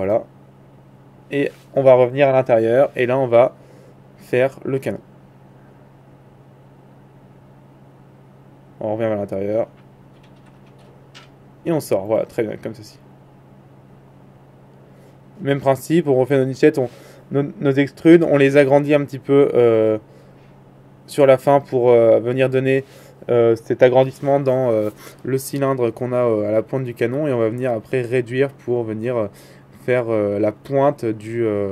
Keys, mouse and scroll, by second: 1.3 e, 2.8 s, 3.7 e, 4.7 e, 5.9 e, 7.8 e, 10.7 e, 14.0 e, 14.8 s, 15.2 e, 16.0 e, 18.1 g, 20.3-21.9 middle drag, 21.9 e, 24.6 e, 26.0 s, 28.2 e, 29.3 e.